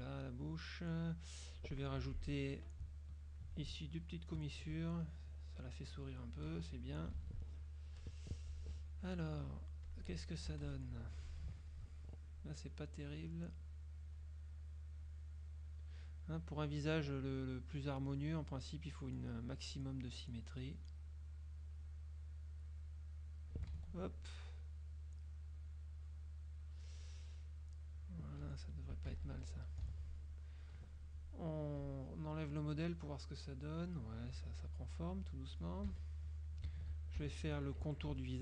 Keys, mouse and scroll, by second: 0.6-1.9 drag, 2.1 F6, 3.3 shift+click, 4.5 shift+click, 5.7 click, 6.4 click, 6.6 KP_Subtract, 8.1 KP_Subtract, 8.8 F2, 9.9 click, 10.6 z, 10.7 click, 11.1 F2, 11.8 ctrl+click, 12.8 click, 14.3 click, 15.1 click, 16.5 click, 18.6 click, 20.7 click, 21.9 click, 22.9 click, 23.9 ctrl+z, 24.6 click, 25.8 click, 27.7 click, 28.5 F1, 29.9 ctrl+KP_Subtract, 30.5 ctrl+s, 30.5 ctrl+click, 30.6 ctrl+right click, 30.7 ctrl+click, 31.9 click, 32.3 click, 33.9 click, 34.7-35.8 drag, 36.0 KP_Subtract, 37.3 ctrl+KP_Subtract.